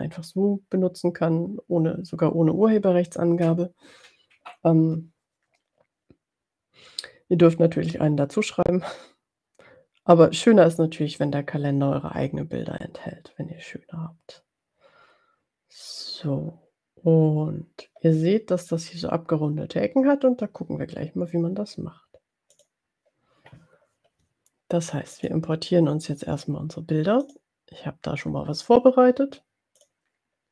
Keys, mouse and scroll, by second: 22.5 click, 25.4 click, 27.5 click, 29.8 click.